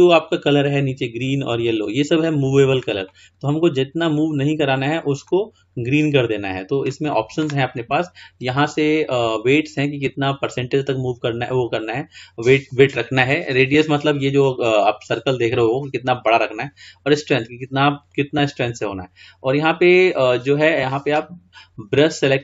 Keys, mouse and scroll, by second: 3.3-8.2 middle drag, 20.5-22.4 drag.